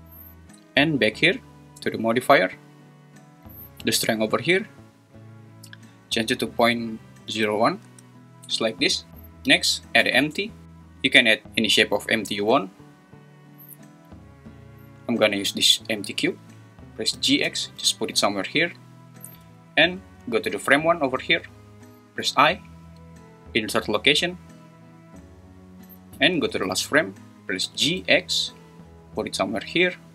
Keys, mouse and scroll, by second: 2.0 click, 4.0-7.9 drag, 10.0 shift+a, 17.5 x, 18.7 click, 19.8 shift+click, 22.2 i, 26.7 shift+right click, 27.6 g, 28.0 x.